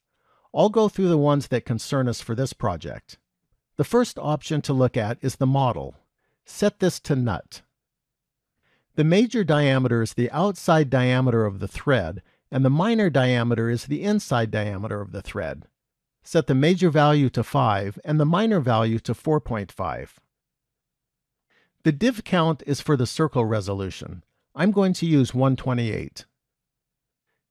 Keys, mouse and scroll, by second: 5.5 click, 16.5 click, 19.5 click, 25.2 click.